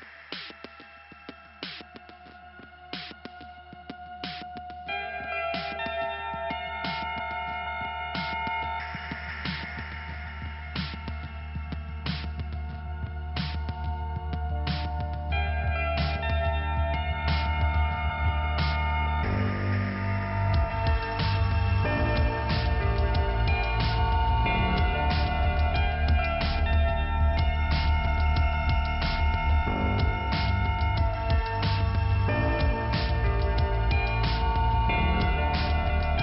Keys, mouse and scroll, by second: 0.7 click, 1.5 click, 5.7 click, 5.7 click, 6.7 click, 7.4 click, 7.5 click, 9.4 click, 9.5 click, 10.7 click, 10.8 click, 12.1 click, 12.7 click, 13.3 click, 13.3 click, 14.1 click, 15.0 click, 17.3 click, 19.1 click, 19.2 click, 20.0 click, 21.5 click, 24.4 click, 25.6 click, 28.2 click, 28.6 click, 29.3 click, 31.0 click, 31.4 click, 31.5 double click, 32.0 double click, 34.1 click.